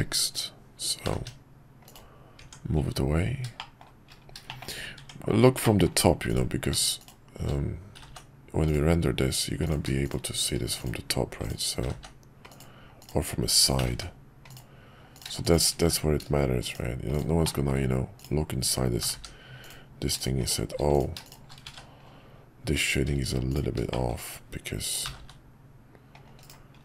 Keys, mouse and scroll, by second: 1.0 g, 2.4 Tab, 3.5 shift+middle drag, 4.4 middle click, 5.6 middle click, 6.2 click, 7.0 shift+click, 7.9 g, 10.0 click, 10.8 click, 11.4 click, 11.8 g, 13.0 click, 15.4 shift+click, 15.9 1, 17.4 middle click, 20.2 shift+click, 20.4 shift+click, 20.9 click, 21.7 shift+1, 23.5 click, 23.9 middle click.